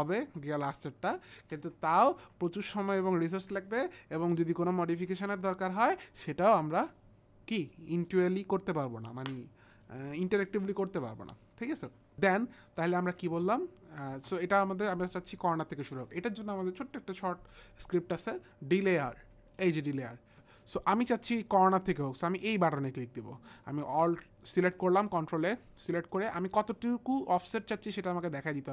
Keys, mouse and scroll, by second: 1.5 ctrl+z, 2.2 ctrl+z, 12.8 click, 13.3 space, 14.1 space, 17.9 click, 23.8 ctrl+a, 24.5 click, 26.1 click.